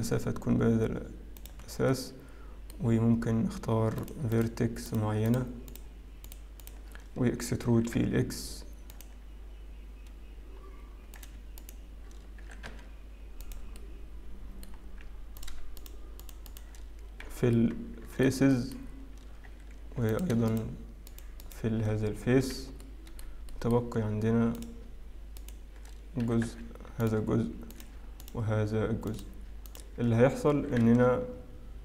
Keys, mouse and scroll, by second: 1.7-2.2 scroll down 2, 2.2 middle click, 2.2-2.8 scroll down 1, 3.3-4.0 scroll up 1, 4.0 click, 4.3 shift+click, 4.9 click, 5.3 click, 5.7 shift+click, 6.2 shift+click, 8.7 shift+click, 8.7 e, 11.2 click, 11.6 shift+click, 14.5 middle click, 14.5 e, 15.4 click, 15.8 shift+click, 16.2 shift+click, 16.5 shift+click, 17.2 f, 17.5 middle click, 18.5 shift+middle click, 18.9-19.7 scroll up 1, 19.7-20.2 scroll up 1, 20.2 click, 22.7 shift+click, 22.7 f, 22.8 middle click, 23.9 shift+middle click, 23.9-24.6 scroll up 2, 24.6 click, 25.4 shift+click, 26.9 e, 27.7 click, 28.2 shift+click, 30.3 shift+click, 31.1 e.